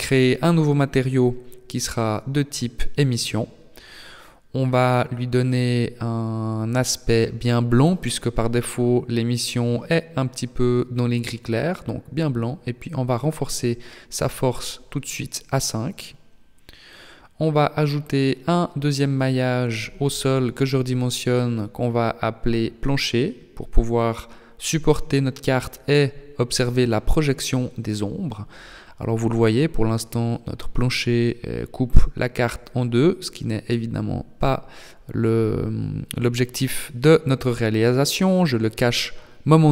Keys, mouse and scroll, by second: 2.3 click, 9.3 click, 12.7 click, 16.7 shift+a, 18.5 s, 21.4 click, 21.9 click, 23.5 o, 24.3 BackSpace, 24.5 BackSpace, 25.6 o, 30.7 KP_1, 32.1 shift+middle click, 33.0-33.9 scroll up 1, 34.4 h, 36.8 a, 38.1 a, 38.8 b.